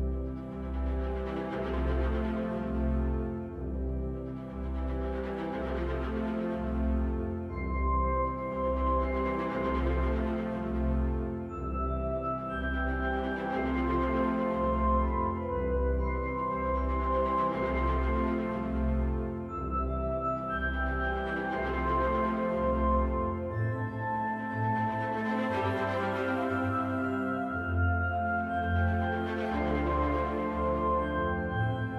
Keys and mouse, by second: 7.1-9.5 right drag, 14.7 right click, 20.2-21.1 right drag, 22.5-24.4 right drag, 25.4 KP_1, 27.8-30.0 right drag.